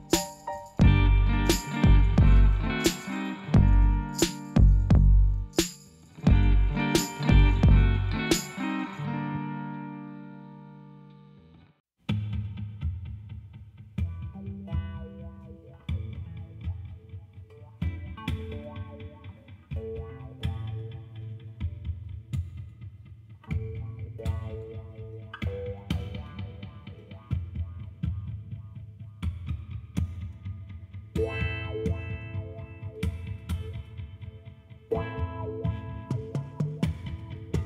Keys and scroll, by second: 1.9 s, 2.1 i, 2.5 Return, 4.9 Return, 6.2 ., 6.3 2, 6.5 Return, 9.6 shift+d, 9.7 z, 11.8 r, 12.4 Return, 14.0 g, 14.2 x, 15.2 z, 18.6 g, 18.8 z, 19.5 s, 21.5 alt+a, 23.8 y, 29.0 Tab, 30.1 3, 30.6 shift+s, 31.4 shift+a, 35.5 shift+z.